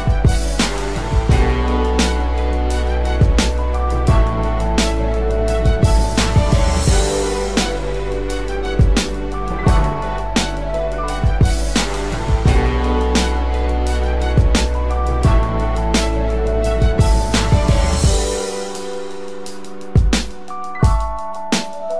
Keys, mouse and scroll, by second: 2.9 ctrl+t, 20.0 Return.